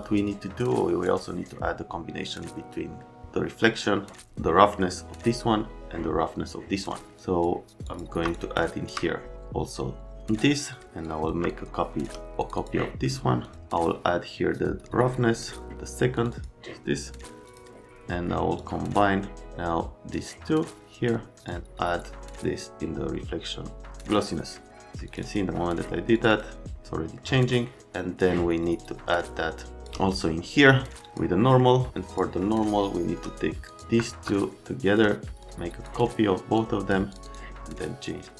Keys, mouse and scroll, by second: 0.0 click, 0.6 click, 3.0 right click, 7.1 click, 7.8 click, 8.3 shift+click, 10.1 click, 10.7 click, 11.0 click, 11.4 shift+click, 12.3 click, 12.5 click, 13.4 click, 18.5 click, 20.1 click, 21.4 click, 25.0 click, 25.2 click, 26.1 click, 26.3 click, 27.2 middle click, 27.9 click, 28.7 click, 31.0 click, 31.4 middle click, 31.9 click, 33.6 ctrl+click, 34.2 shift+click, 35.4 click, 36.5 click, 37.1 click, 37.2 click.